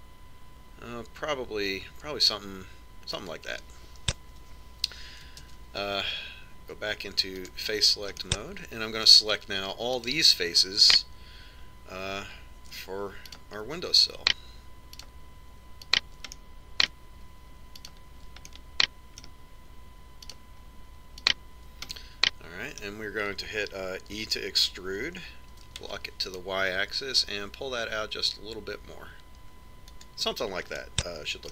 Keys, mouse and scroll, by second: 6.3 ctrl+Tab, 9.1-10.8 middle drag, 10.8-12.8 right drag, 14.2-18.3 right drag, 17.3-19.0 middle drag, 18.7-20.4 right drag, 19.4 middle click, 19.4 click, 20.4 middle click, 21.2-23.1 right drag, 22.8 click, 23.1 middle click, 23.6 click, 23.6 right click, 23.9 middle click, 25.1 e.